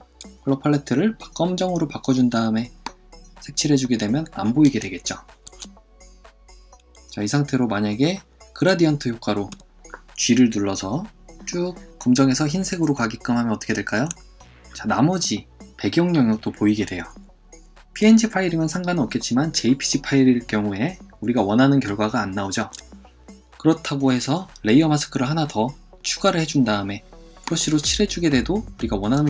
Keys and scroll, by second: 5.5 super+f, 9.5 이, 22.6 super+z.